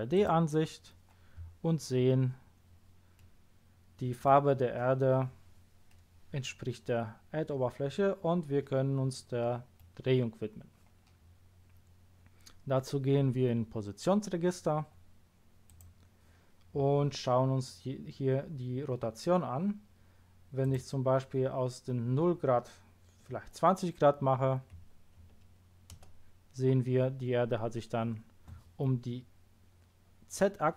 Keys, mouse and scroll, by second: 0.1 click, 1.9-2.4 scroll up 2, 3.1-3.9 middle drag, 5.9-6.3 middle drag, 9.7-15.7 scroll up 1, 15.7 click, 20.6 click, 24.7 KP_2, 25.1 KP_0, 25.9 Return.